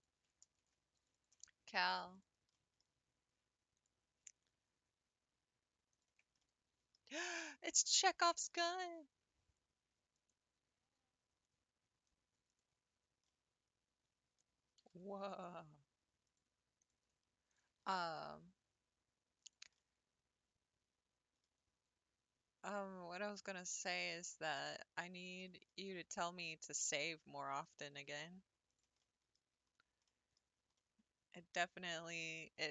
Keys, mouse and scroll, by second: 0.5 ctrl+r, 1.0 ctrl+r, 2.1 click, 2.7-3.8 middle drag, 3.8 click, 4.3-4.7 scroll up 2, 5.9 ctrl+click, 6.5 middle click, 7.2 scroll down 1, 7.7 click, 8.3 shift+middle click, 8.7 g, 10.8 r, 10.9 r, 13.3-14.8 middle drag, 14.8 g, 14.9 g, 16.8 click, 17.5 ctrl+click, 17.9 middle click, 18.3 g, 19.8-22.6 middle drag, 22.6-23.3 scroll up 2, 24.1 click, 25.0 ctrl+click, 25.6 middle click, 25.8 g, 27.6 click, 28.2 g, 29.0 middle click, 29.4 Tab, 29.8 scroll down 3, 30.1-30.5 middle drag, 30.6 scroll down 4, 30.8-32.4 middle drag, 32.4-32.7 scroll up 4.